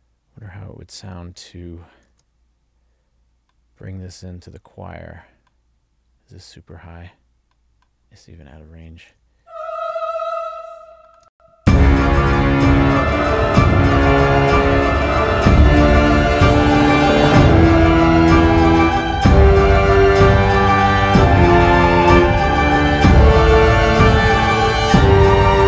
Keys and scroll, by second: 2.2 super+v, 9.5 alt+shift+Down, 11.4 space.